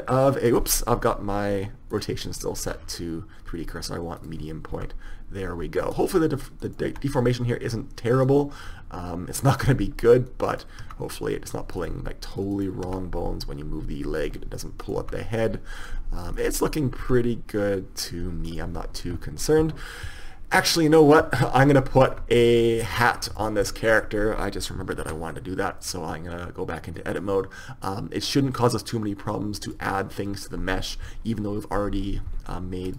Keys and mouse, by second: 2.1-3.6 drag, 4.9 r, 7.0 r, 8.5 right click, 10.7-11.9 right drag, 11.0 r, 11.9-12.6 drag, 12.7-14.7 drag, 13.0 r, 15.0 click, 15.1 r, 17.2 r, 23.8 Tab, 25.1 ctrl+r.